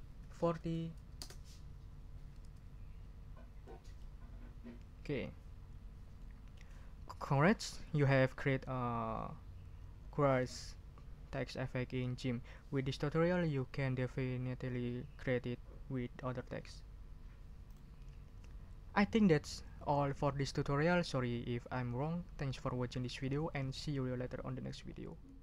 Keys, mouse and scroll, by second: 0.1 ctrl+4, 0.5 ctrl+o, 1.2 Return, 3.2 ctrl+scroll down 2, 3.6 ctrl+middle click, 6.2 middle click, 9.1 ctrl+scroll up 2, 17.7 click, 17.7 middle click.